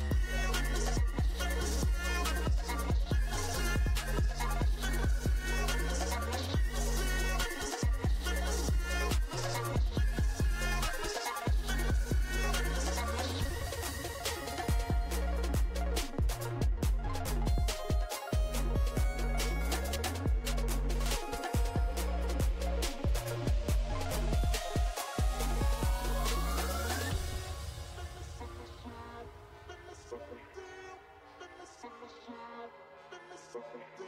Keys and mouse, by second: 4.9-10.2 drag, 10.2 d, 11.7 f, 12.8 ctrl+z, 13.8 click, 22.2 f, 23.4-27.1 drag, 23.4-25.0 right drag, 29.6 ctrl+z, 31.3 click, 31.3 right click, 33.5-34.0 right drag.